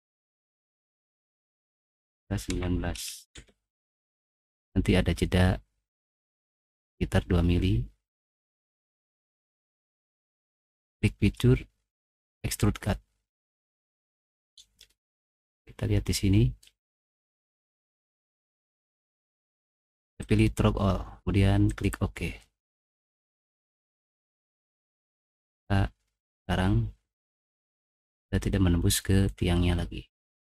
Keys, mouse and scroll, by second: 0.7 click, 1.0 click, 2.5-3.3 typing, 6.6 middle click, 7.5 middle click, 10.9 click, 12.2 click, 14.9-16.6 middle drag, 18.2 click, 20.2 click, 21.7 click, 24.7 middle click, 25.2 click, 27.2-28.3 middle drag.